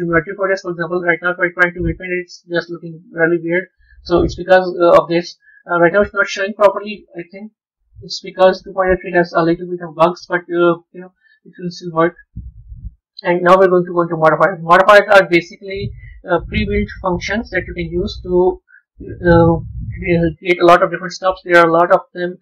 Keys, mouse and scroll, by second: 1.0-3.3 drag, 3.3 ctrl+z, 5.1-6.6 drag, 6.6-11.2 middle drag, 11.2-13.9 drag, 17.4-20.4 middle drag, 21.8 click.